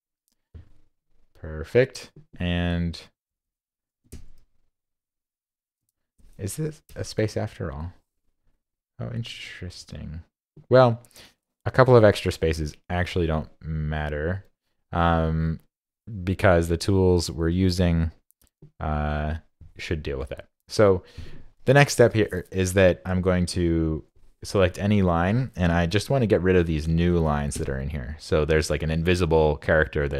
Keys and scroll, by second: 9.3 super+z.